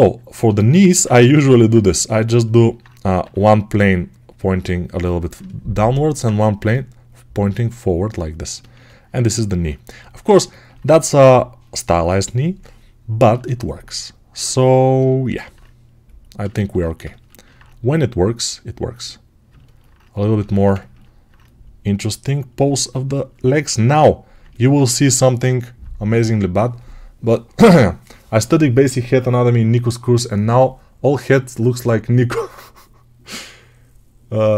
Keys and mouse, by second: 3.1 3, 6.4 g, 8.3-17.3 ctrl+alt+right drag, 23.2-34.5 drag.